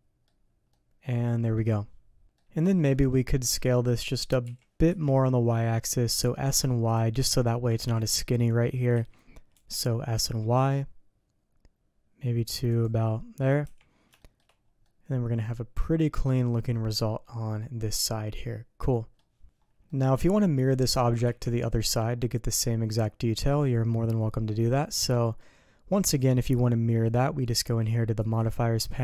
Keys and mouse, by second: 0.7-1.5 middle drag, 2.2 middle click, 2.7 shift+click, 3.1 click, 4.4 s, 7.8 ctrl+z, 8.9 s, 13.6 h, 14.2 shift+click, 14.8-16.2 drag, 16.2-19.1 middle drag, 19.8-20.4 middle drag, 20.8 middle click, 21.3 ctrl+z, 21.7-22.5 middle drag, 23.6-24.6 middle drag, 25.3-25.9 middle drag, 28.2 click.